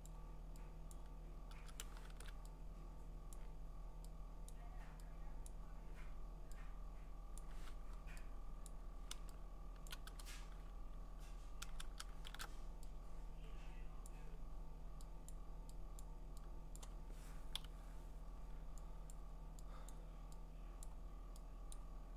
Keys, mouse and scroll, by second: 0.2 click, 0.9 click, 3.3 click, 4.5 click, 5.5 click, 7.4 click, 8.7-9.8 click, 9.7 click, 9.9 click, 9.9 click, 12.3 alt+shift+r, 14.0 click, 15.3 click, 16.0 click, 16.8 click, 17.6 0, 19.1 click, 19.9 click, 20.9 click, 21.7 click.